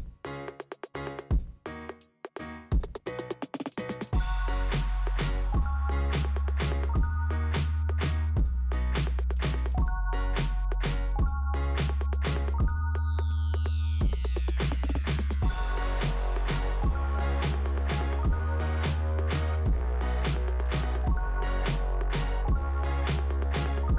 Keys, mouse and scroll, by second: 1.1 click, 2.0 click, 3.0 scroll down 2, 4.3 scroll up 2, 5.3 middle click, 5.6 middle click, 6.7 click, 7.5 click, 8.8 middle click, 10.1 click, 11.7 click, 12.6 scroll down 2, 14.6 scroll up 2, 16.1 click, 16.7 click, 18.0 middle click, 18.0 click, 18.8 right click, 20.0 middle click, 21.0 click.